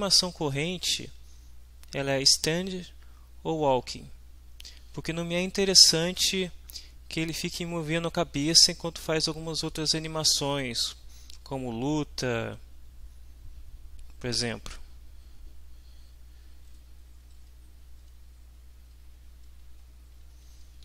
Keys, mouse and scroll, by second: 0.8 Left, 16.9 Down, 17.7 Up, 18.8 Home, 19.8 Right, 20.5 Left.